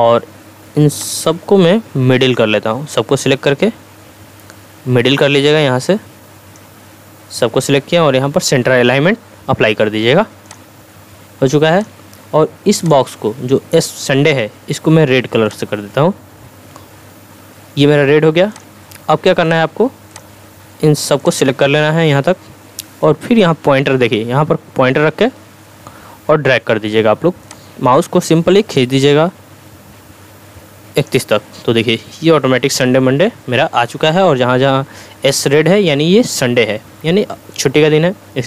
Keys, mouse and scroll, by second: 15.5 click, 18.5-22.5 drag, 27.5-31.2 drag.